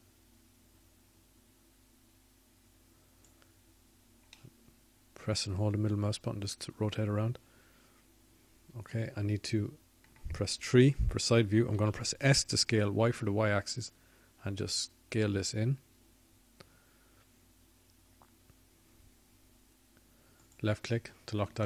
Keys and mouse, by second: 0.1-3.5 drag, 16.4 KP_3, 17.9 s.